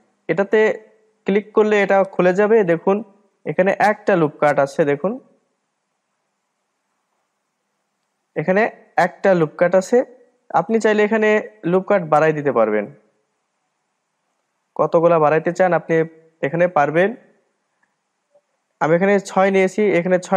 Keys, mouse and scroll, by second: 0.2-3.3 drag, 3.3-4.9 middle drag, 4.9-5.4 scroll up 2, 5.4-5.7 scroll down 2, 5.7-8.8 middle drag, 11.6-13.3 drag, 13.3-16.3 middle drag.